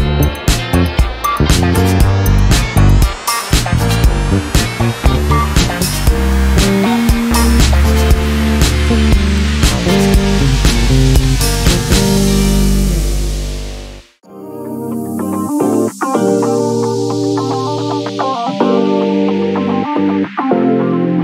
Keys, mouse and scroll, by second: 1.4 shift+click, 3.5 click, 5.6 click, 8.4 click, 11.5 click, 14.0 click, 14.9 click, 16.4 click, 17.2-17.7 ctrl+scroll up 4, 18.3-20.1 ctrl+drag, 20.7 click.